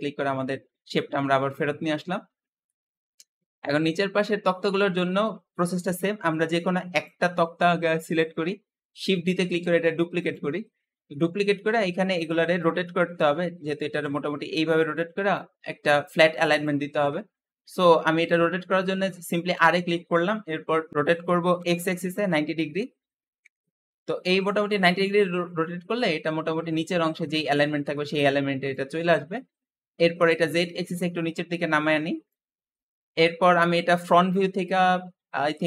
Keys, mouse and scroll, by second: 0.8-4.8 middle drag, 4.8 scroll up 2, 5.7-6.8 middle drag, 6.8 click, 7.4 scroll down 2, 8.1-8.6 scroll up 2, 8.6 shift+middle click, 9.3 shift+d, 10.9-12.0 middle drag, 12.0 click, 12.7-17.0 shift+middle drag, 17.1-17.5 scroll up 2, 19.4 r, 24.0-24.3 scroll down 2, 24.3-27.5 middle drag, 27.8-28.9 middle drag, 28.9-29.5 scroll up 1, 30.1 click, 33.0 KP_1, 34.3 KP_3.